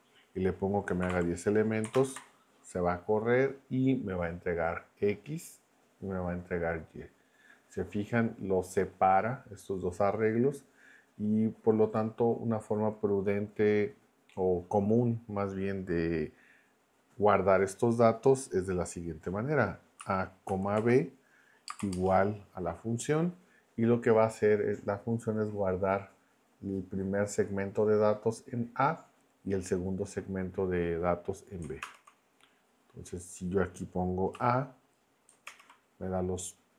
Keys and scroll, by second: 0.8-1.6 typing, 1.9 ctrl+Return, 19.8-21.9 typing, 31.8 ctrl+Return, 34.3 a, 35.4 ctrl+Return.